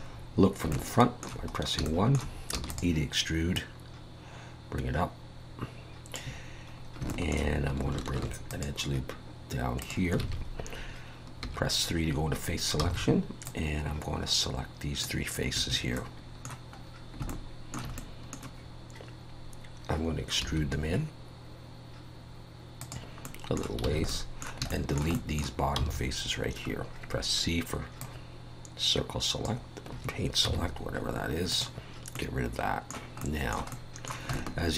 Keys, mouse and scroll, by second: 0.0-0.6 scroll up 5, 0.7 shift+middle click, 1.5 scroll up 2, 1.9 shift+middle click, 2.5 e, 3.6 click, 6.8 scroll up 2, 7.1 shift+middle click, 8.1 ctrl+r, 10.2 alt+a, 11.4 3, 12.2 scroll up 2, 12.8 c, 16.0 middle click, 16.8 scroll down 1, 17.3 shift+middle click, 18.0 middle click, 20.4 e, 23.2 middle click, 23.9 alt+a, 24.1 middle click, 24.7 shift+middle click, 25.1 middle click, 25.8 c, 30.5 x, 32.1 middle click, 33.3 middle click, 33.7 middle click, 34.3 shift+middle click.